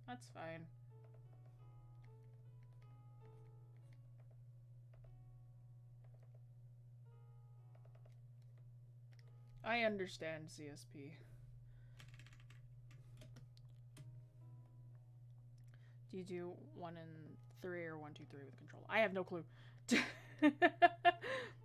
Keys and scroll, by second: 17.2 ctrl+z.